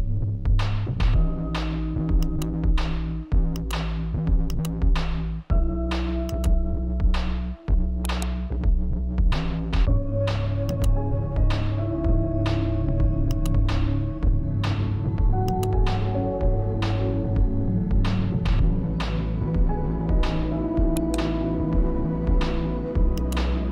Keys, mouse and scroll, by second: 0.9-3.5 shift+right drag, 3.5 click, 7.9 click, 9.5 right click, 11.9 click, 14.4 click, 16.3-21.9 drag, 21.9-23.7 shift+right drag.